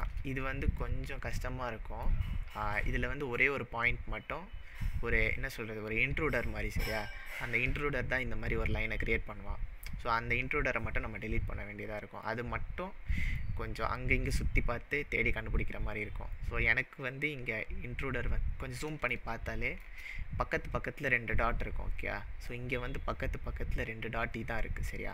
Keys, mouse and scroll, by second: 12.3-13.4 middle drag, 13.7-15.5 scroll up 3, 16.8-18.8 scroll up 5, 19.2-20.0 shift+middle drag, 24.8-25.1 scroll up 7.